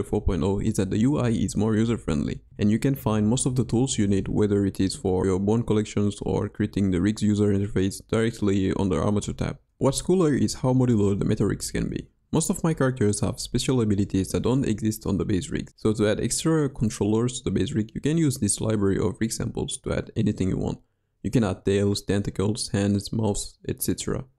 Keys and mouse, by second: 0.7 g, 4.3 click, 4.8 g, 6.5 click, 7.1 click, 10.4-11.4 drag, 14.4 click, 16.2 g, 22.2 r, 24.2 r.